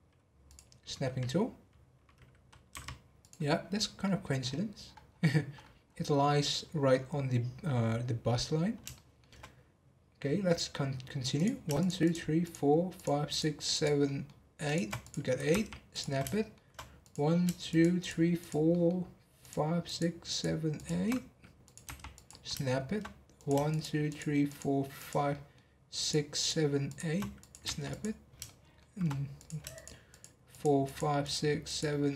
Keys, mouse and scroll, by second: 0.4 click, 3.6 scroll down 4, 4.0 middle click, 4.4 scroll up 2, 4.8-5.2 scroll down 8, 5.5-5.9 scroll up 8, 6.1 middle click, 6.4-7.8 scroll down 5, 7.8 scroll down 5, 8.3-8.7 scroll up 10, 8.9-11.3 shift+middle drag, 11.3 click, 11.7 shift+click, 12.0 shift+click, 12.4 shift+click, 12.9 shift+click, 13.3 shift+click, 13.7 shift+click, 14.0 shift+middle click, 14.6 shift+click, 15.0 click, 16.1 scroll down 1, 16.3 shift+middle click, 17.0 click, 17.7 shift+click, 18.0 shift+click, 18.4 shift+click, 18.7 shift+middle click, 19.4 shift+click, 19.8 shift+click, 20.2 shift+click, 20.7 shift+click, 21.0 scroll up 1, 21.6 click, 22.4 scroll down 1, 22.6 shift+middle click, 23.3 click, 23.7 shift+click, 24.0 shift+click, 24.5 shift+click, 24.9 shift+click, 25.3 shift+middle click, 26.0 shift+click, 26.3 shift+click, 26.8 shift+click, 27.4 click, 28.2 scroll down 1, 28.4 shift+middle click, 29.3 click, 29.7 shift+click, 30.1 shift+click, 30.5 shift+click, 30.8 shift+click, 31.2 shift+click, 31.6 shift+click.